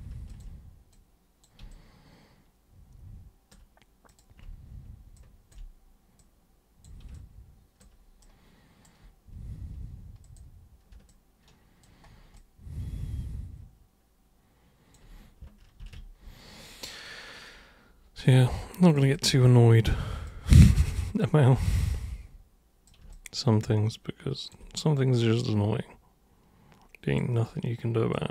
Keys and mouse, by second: 0.3 ctrl+shift+super+click, 0.9 super+click, 1.7-3.5 alt+super+drag, 4.1 super+click, 5.1-5.5 ctrl+shift+super+drag, 6.2 super+click, 7.1-7.8 alt+super+drag, 8.2 super+right click, 10.2 super+click, 11.1 alt+super+click, 12.3-14.9 alt+super+drag, 15.8 ctrl+super+d, 17.1-18.9 super+drag, 19.1-20.2 alt+super+drag, 21.6-22.9 super+drag, 23.1-24.5 alt+super+drag, 25.4 super+click, 28.1 super+click.